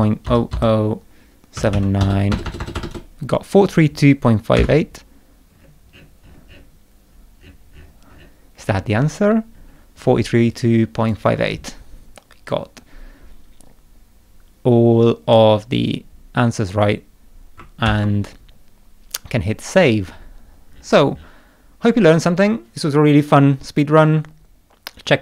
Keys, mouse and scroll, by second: 4.6 Return, 5.5-6.7 scroll down 6, 7.1-8.4 scroll down 5, 8.6-9.2 scroll down 1, 9.5 scroll up 1, 10.5 click, 16.7 click, 17.8 ctrl+s, 20.0-21.4 scroll up 7.